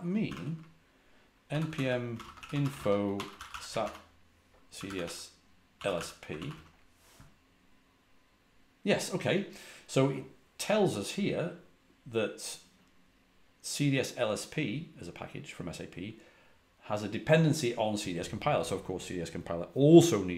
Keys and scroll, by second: 0.0-6.3 typing, 6.4 Return.